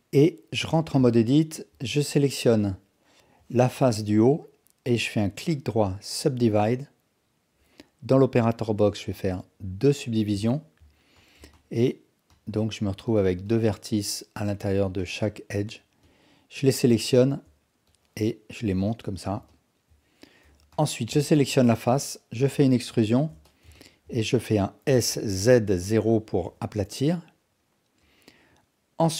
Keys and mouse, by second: 0.6 Tab, 1.1 alt+click, 3.5 click, 9.3 click, 10.6 ctrl+alt+click, 18.0-19.3 drag, 19.6 alt+click, 20.5 3, 21.2 click, 22.4 e, 23.5 alt+shift+click, 23.8 ctrl+alt+click, 24.9 s, 28.2 click.